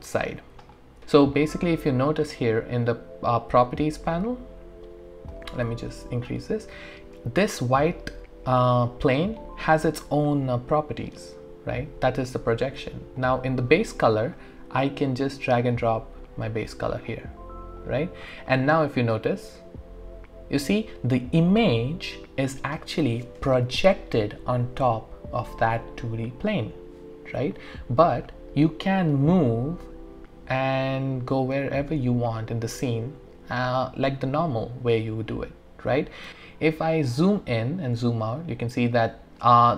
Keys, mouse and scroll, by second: 1.0-2.1 alt+drag, 5.3-8.5 drag, 5.4 typing, 9.7 scroll up 1, 10.4 typing, 11.8 typing, 14.3-18.1 drag, 14.3 typing, 18.3 click, 18.3 typing, 18.8-22.8 alt+drag, 27.6 alt+click, 27.7 alt+right click, 28.5-36.3 alt+middle drag, 36.3 ctrl+right click, 36.7 scroll up 1, 37.1-37.8 scroll down 1, 38.3-39.0 scroll up 1, 39.0-39.4 scroll down 1, 39.4-39.7 scroll up 1.